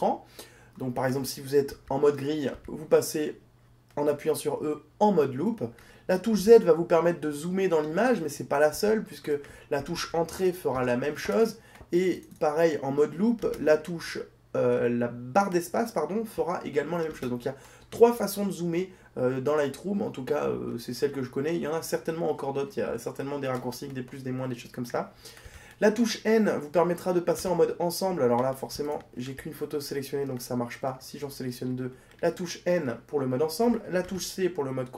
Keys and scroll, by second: 6.9 z, 26.2 n, 34.3 c.